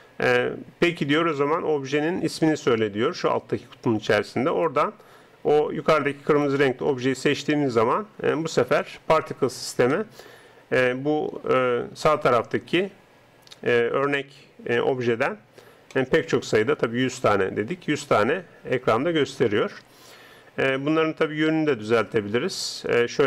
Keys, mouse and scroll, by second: 8.9-18.9 middle drag, 19.4-23.2 middle drag.